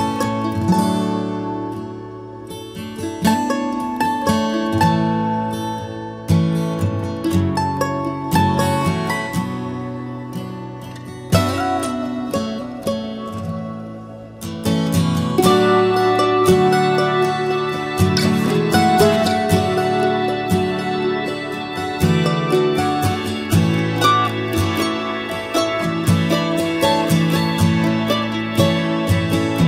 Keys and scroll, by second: 0.5 ctrl+j, 1.8 ctrl+t, 29.2 Return.